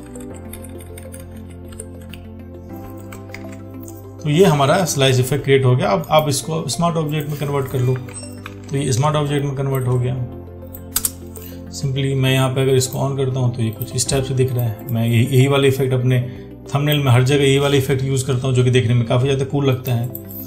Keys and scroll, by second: 3.6 ctrl+d, 8.7 ctrl+t.